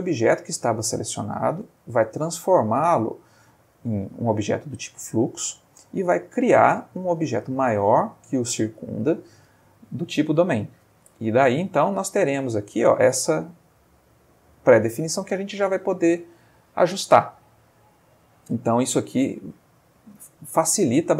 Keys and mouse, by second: 3.0 click, 6.1 click, 11.1 space, 19.4 Escape.